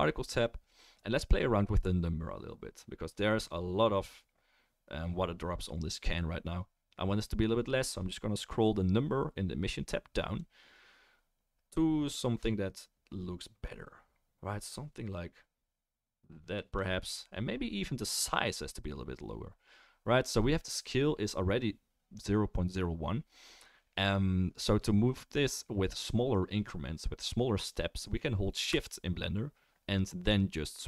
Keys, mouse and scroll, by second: 10.4-11.6 drag.